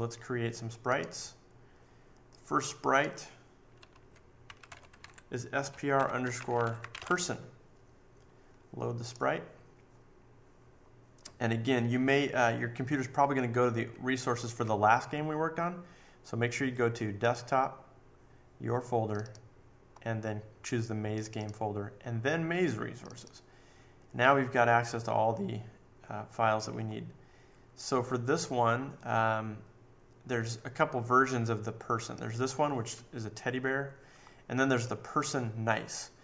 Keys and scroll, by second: 4.2-7.4 typing.